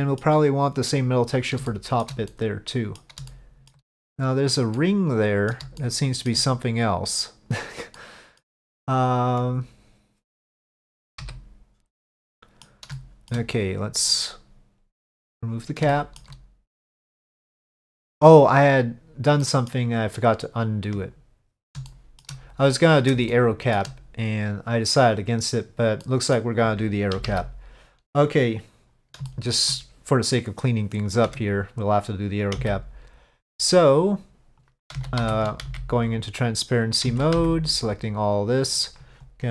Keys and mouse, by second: 1.8 shift+middle click, 2.4 middle click, 3.4 shift+middle click, 4.8 middle click, 5.9 shift+middle click, 8.1 middle click, 11.3 KP_Divide, 12.4 middle click, 13.0 middle click, 15.3 click, 16.0 shift+middle click, 17.8 Tab, 19.5 middle click, 21.2-21.7 middle drag, 21.9-22.3 shift+middle drag, 22.9 middle drag, 23.4-23.9 shift+middle drag, 26.1-26.4 middle drag, 27.2 KP_5, 29.4 shift+middle drag, 31.4 Tab, 32.7 c, 37.2 alt+a, 37.2 c.